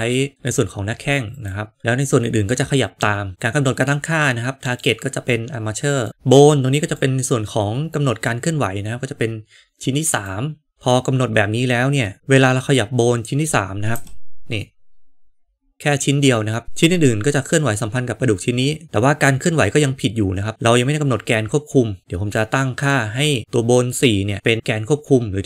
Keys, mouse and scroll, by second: 1.3 click, 5.9 click, 7.0-10.2 drag, 13.8 g.